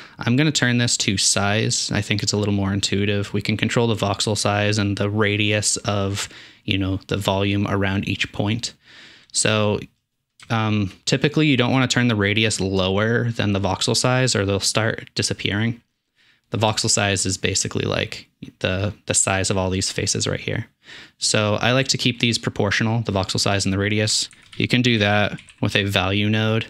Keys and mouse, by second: 13.4 shift+middle click, 14.9 shift+middle click, 17.1-17.6 middle drag, 17.7-18.2 middle drag, 19.8-21.1 middle drag, 21.1-23.8 drag, 24.3 shift+a, 24.6-26.6 drag.